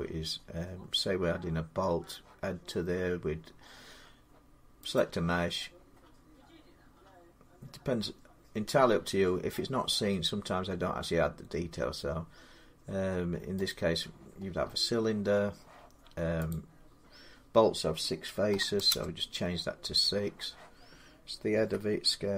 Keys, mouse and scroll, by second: 4.9-9.8 drag, 13.5 click, 14.1 scroll down 1, 14.1 scroll down 1, 14.3 scroll down 1, 14.3 scroll down 1, 14.4 scroll, 14.5 scroll down 1, 14.5 middle click, 16.1 scroll down 10, 16.3 click, 16.3 middle click, 16.7 middle click, 18.3-18.7 typing, 21.3 Return, 21.4 s.